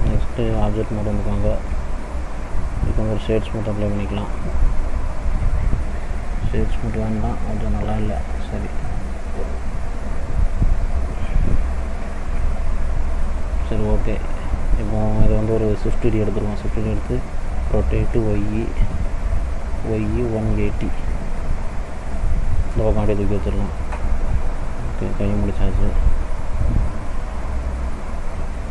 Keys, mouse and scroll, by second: 0.4 click, 1.2 click, 2.9 right click, 4.6 click, 5.0 middle click, 5.5-6.7 scroll up 4, 7.0 ctrl+z, 7.5 ctrl+z, 8.2 middle click, 9.3 middle click, 12.5 scroll down 2, 12.9 middle click, 13.9-14.4 scroll down 2, 14.4 middle click, 16.3 shift+d, 22.7-24.0 scroll down 3, 23.3 middle click, 24.0 click, 26.4 middle click, 27.0 scroll down 1, 27.5 middle click, 28.2 scroll up 1.